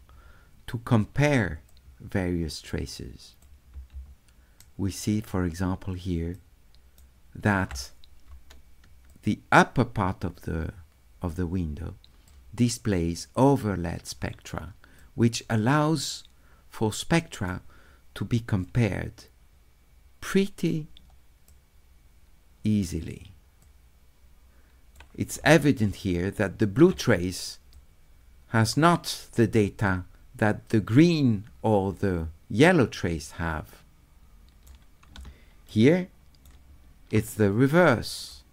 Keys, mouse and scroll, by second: 1.7-3.4 drag, 4.6 shift+right click, 6.3 shift+right click, 9.1-12.3 drag, 15.0-17.5 right drag, 18.7-20.7 drag, 21.5-22.9 right drag, 23.6-24.9 drag, 25.8 shift+middle click, 27.7 click, 32.9-34.7 right drag, 35.7 shift+right click, 38.3-38.5 right drag.